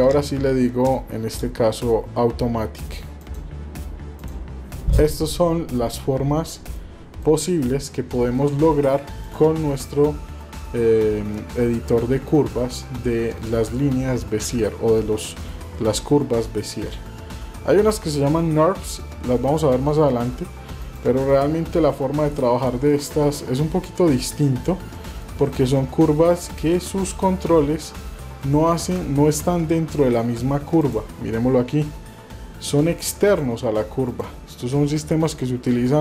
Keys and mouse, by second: 4.1 click, 6.9 shift+middle click, 8.4 Tab, 9.2 click, 22.9-23.4 middle drag, 24.2-24.7 middle drag, 25.1 middle click, 25.6 shift+middle click, 26.7 shift+middle drag, 27.7-28.1 shift+middle drag, 28.5 shift+middle click, 29.4 Tab, 30.8 click, 32.0 g, 34.1 click.